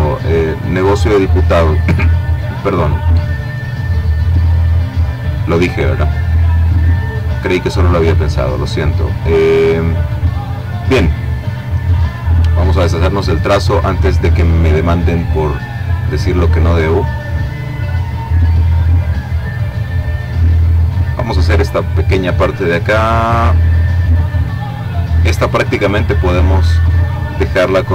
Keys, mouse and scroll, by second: 2.7-4.3 drag, 5.2 click, 7.3-9.3 drag, 12.5 click, 14.7 click, 19.0 click, 24.0 click, 24.9 click, 27.6-27.9 drag.